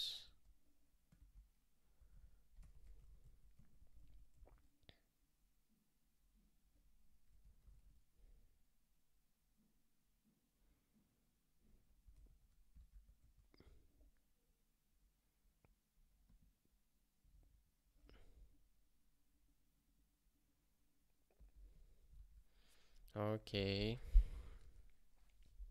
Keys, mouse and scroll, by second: 0.0-4.0 typing, 4.5 ctrl+k, 7.2 BackSpace, 7.7 ctrl+s, 12.3 ctrl+k, 22.1 ctrl+k.